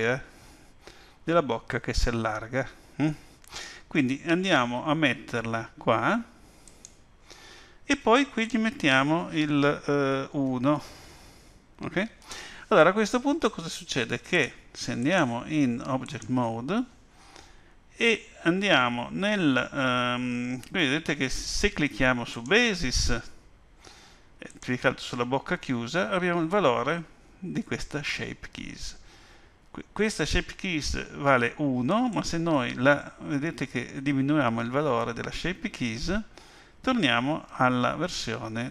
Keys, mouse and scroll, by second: 8.4 click, 15.0 click, 22.3 click, 24.5 click, 32.1 click.